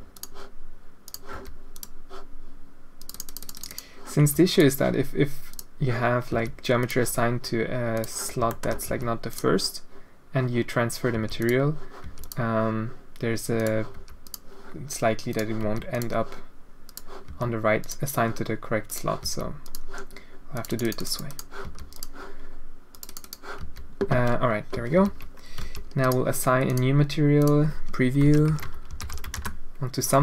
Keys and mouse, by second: 0.1 click, 1.0 click, 1.3 h, 1.7 click, 3.0 click, 3.2 click, 3.5 click, 3.7 click, 4.2 h, 4.5 click, 5.5 click, 6.6 h, 6.8 click, 7.9 click, 8.5 shift+click, 8.9 h, 9.3 click, 11.1 h, 11.4 click, 12.0 h, 12.2 click, 13.5 click, 13.9 h, 14.2 click, 15.3 click, 15.6 h, 15.9 click, 16.8 click, 17.2 h, 17.8 click, 18.8 click, 19.2 h, 19.6 click, 20.5 click, 21.0 click, 21.3 click, 21.6 h, 21.9 click, 22.9 click, 23.2 click, 23.6 h, 24.9 alt+h, 25.7 alt+a, 26.0 click, 26.6 click, 27.4-30.0 drag.